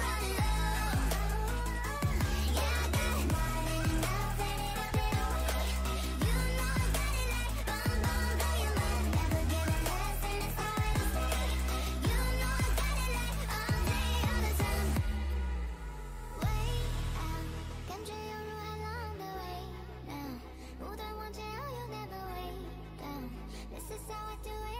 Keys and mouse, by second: 0.7 right click, 1.6 z, 1.7-2.7 drag, 2.9 Tab, 3.9 a, 8.2 right click, 8.6 g, 10.2 middle click, 12.1 right click, 13.0-18.3 middle drag, 19.9 ctrl+z, 24.3 click.